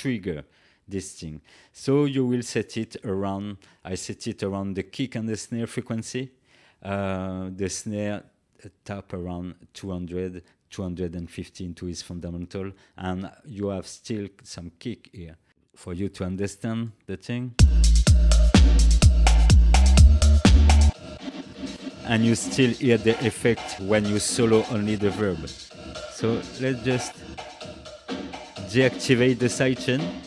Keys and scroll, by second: 17.5 space.